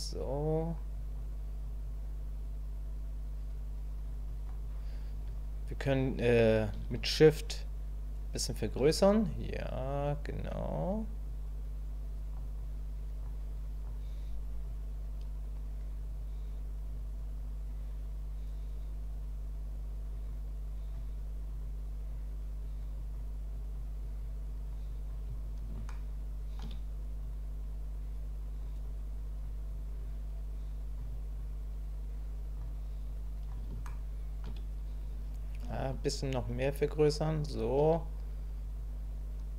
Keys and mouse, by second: 0.2 click, 0.9 click, 1.8-4.1 drag, 4.3 click, 7.0-8.7 shift+drag, 9.4-10.9 drag, 11.3-12.3 drag, 12.6 click, 13.5 click, 14.6-20.9 drag, 21.5 click, 22.1-23.1 drag, 23.5 click, 24.0 click, 24.5 click, 24.9 click, 25.9 shift+click, 27.2-28.6 drag, 28.8 click, 30.0 click, 31.4-32.6 drag, 33.1 click, 33.9 shift+middle click, 36.1-39.5 shift+drag.